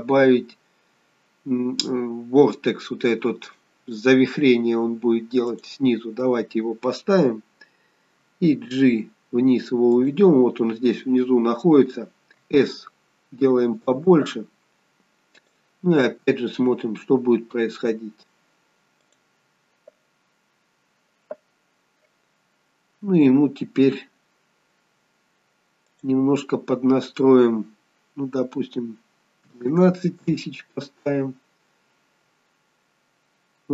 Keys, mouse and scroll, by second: 7.1-8.6 scroll down 2, 8.6 g, 12.3 s, 15.3 click, 19.1 click, 26.1 click.